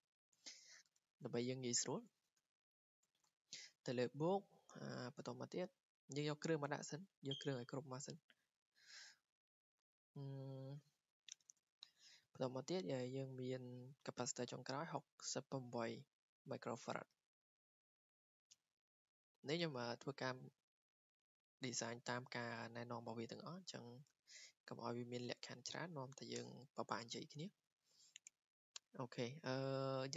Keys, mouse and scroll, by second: 0.0 click, 2.4-3.3 typing, 4.3 click, 4.8 Escape, 7.2 click, 9.2 Escape, 9.2 click, 17.3 click, 21.2 click, 23.9 click, 24.7 click, 25.4-25.9 typing, 26.4 Return, 27.6 typing.